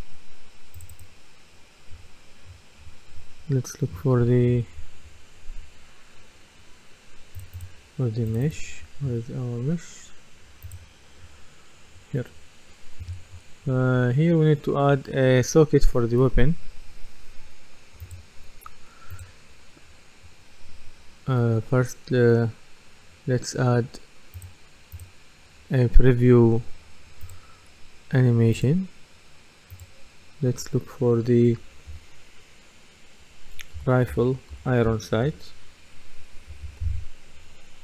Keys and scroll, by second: 33.8-35.7 typing.